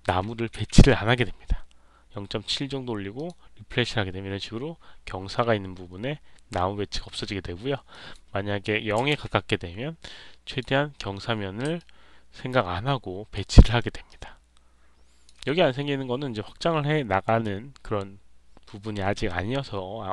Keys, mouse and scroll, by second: 3.1 click, 7.8 click, 10.4 click, 11.7-13.3 alt+drag, 13.4 alt+right click, 13.7 alt+middle click, 14.0-15.2 alt+drag.